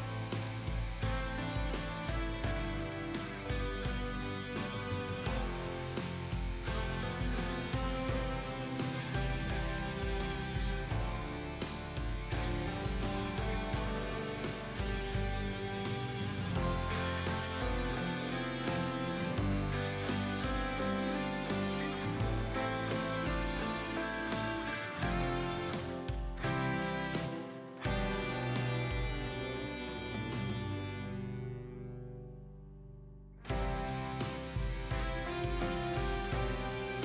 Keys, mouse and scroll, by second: 1.8 click, 4.0 click, 8.8 typing, 10.4 space, 10.5 click, 18.9 KP_4, 19.2 Tab, 20.0 KP_1, 20.2 Tab, 21.1 KP_2, 21.3 KP_6, 21.8 Tab, 23.5-30.4 drag, 34.2 right click, 34.6 click.